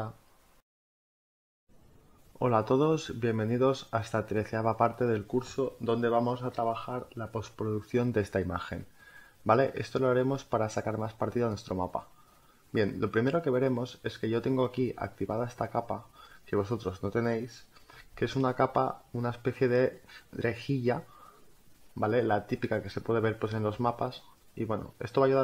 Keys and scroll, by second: 13.3 space.